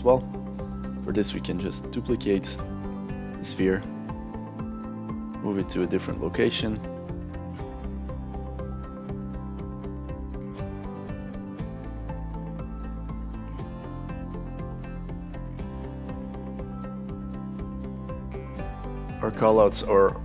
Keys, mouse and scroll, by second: 1.0 click, 2.0-2.6 right drag, 3.3 click, 5.3-7.2 drag, 7.3 alt+click, 7.4 click, 7.7 click, 8.1 alt+click, 8.2 alt+right click, 8.4 alt+drag, 8.6 click, 9.0 click, 9.2 drag, 9.4 alt+right click, 9.5 alt+click, 9.6 alt+middle click, 9.9 click, 10.8 click, 11.1 click, 11.4 click, 11.6 click, 11.7 click, 12.1 click, 12.3 alt+click, 12.6 click, 12.8 alt+right click, 13.0 click, 13.4 click, 13.6 click, 13.7 alt+right click, 13.8 alt+right click, 13.9 alt+middle click, 14.0 alt+click, 14.1 click, 15.1 click, 15.4 click, 15.7 click, 15.9 alt+click, 16.0 drag, 16.2 click, 16.3 alt+click, 16.4 click, 16.5 alt+middle click, 16.7 alt+click, 17.0 click, 17.2 alt+click, 17.3 alt+click, 17.4 click, 18.5 click, 19.0 alt+drag.